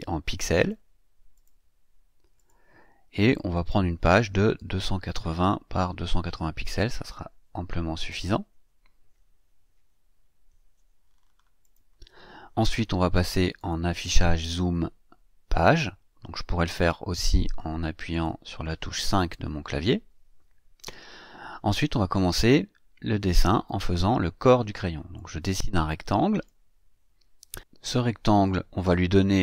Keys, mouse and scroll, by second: 0.6 click, 1.3 click, 2.3 click, 3.3 click, 4.6 KP_2, 4.8 KP_8, 5.0 KP_0, 5.8 Tab, 6.1 KP_2, 6.3 KP_8, 6.5 KP_0, 7.9 click, 11.6 click, 13.6 click, 18.1 click, 19.4 KP_5, 23.6 click, 25.1-26.6 drag.